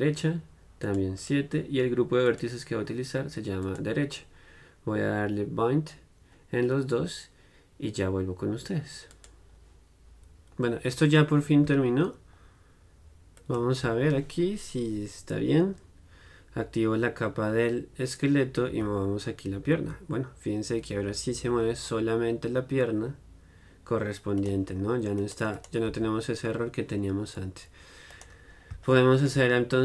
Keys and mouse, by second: 1.0-11.8 drag, 13.6-15.4 drag, 24.6-29.8 right drag.